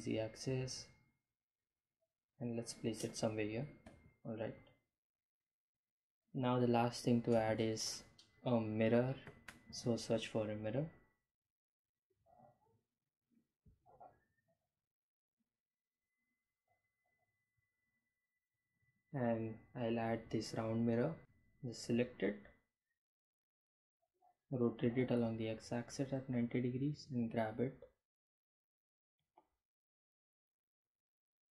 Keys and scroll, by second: 0.0 g, 0.2 z, 4.7 g, 4.9 z, 9.8-10.6 typing, 23.7 r, 24.0 x, 24.3 9, 24.5 0, 24.8 Return, 25.6 g, 25.7 y, 31.1 g, 31.4 y.